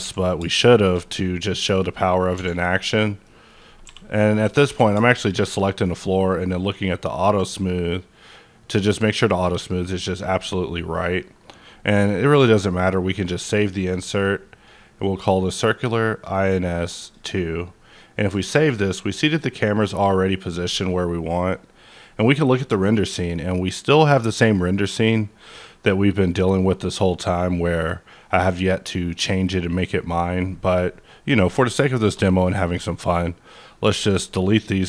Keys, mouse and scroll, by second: 0.0 q, 0.7 click, 1.2-2.3 scroll down 1, 2.3 scroll down 6, 3.0 middle click, 3.2 scroll down 1, 3.5 click, 3.8 g, 4.3 right click, 4.7 q, 5.0 shift+click, 5.5-5.9 scroll down 2, 6.2-7.2 scroll down 5, 7.2 click, 9.6-11.5 scroll up 3, 12.2-16.2 drag, 12.2-12.5 scroll up 1, 16.2 click, 17.0 click, 18.3 KP_0, 21.9 click, 21.9 KP_0, 31.4 click, 31.9 shift+click, 32.3 right click, 33.2-34.8 drag.